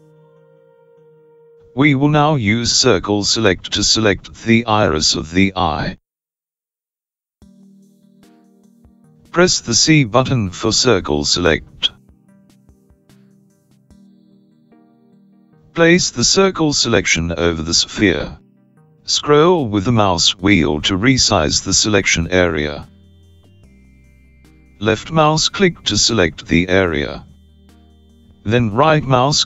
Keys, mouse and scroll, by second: 10.4 c.